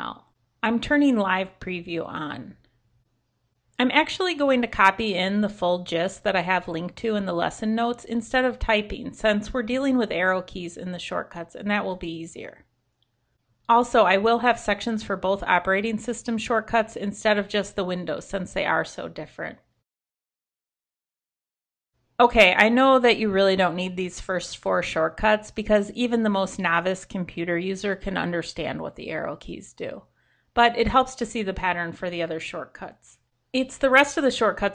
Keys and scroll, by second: 13.9 super+c, 17.2 super+Left, 17.8 super+v.